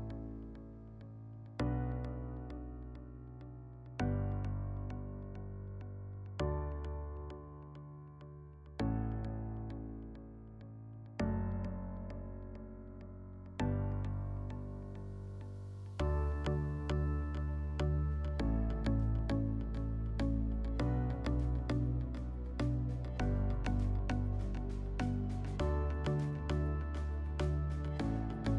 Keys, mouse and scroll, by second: 2.2 click, 2.4 click, 7.0 click, 8.5 click, 9.7 click, 10.4 click, 12.6 click, 15.3 alt+middle click, 16.0 F4, 16.9 middle click, 17.7 click, 21.7 alt+middle click, 23.8 click, 24.1-25.4 alt+middle drag.